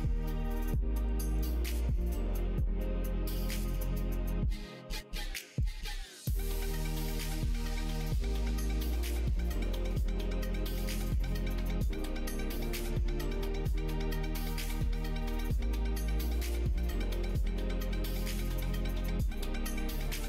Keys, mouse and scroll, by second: 1.4 click, 1.9 ctrl+r, 14.4 3, 16.1-17.8 drag, 18.5-20.2 shift+drag.